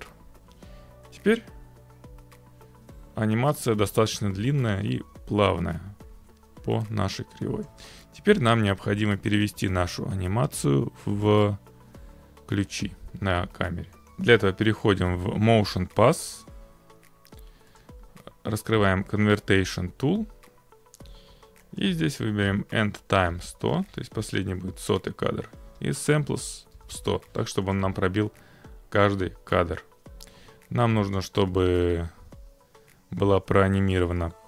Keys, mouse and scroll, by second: 7.7-8.8 drag, 9.5-16.6 drag, 17.8 click, 21.8 click, 22.1 1, 23.3 0, 23.4 0, 24.4 click, 25.7 1, 27.0 0, 27.8 click.